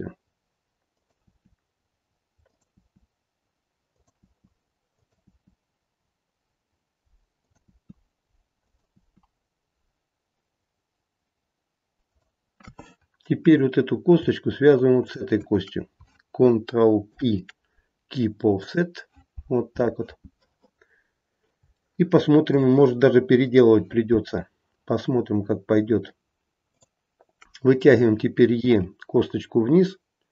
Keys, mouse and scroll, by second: 2.7 e, 7.6 e, 8.9 e, 13.4 click, 15.0 shift+click, 17.0 ctrl+p, 20.8-21.5 scroll down 2, 21.8 shift+middle click, 22.5 shift+middle click, 26.6 click, 28.6 e.